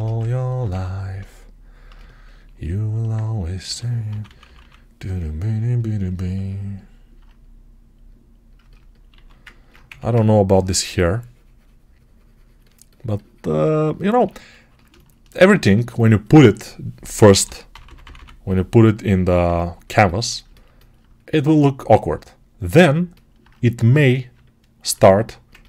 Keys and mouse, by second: 3.5 g, 4.0 ], 6.9-15.2 right drag, 9.0 alt+q, 9.7 1, 17.1 g, 17.6 ], 17.7 ], 23.3-25.6 right drag.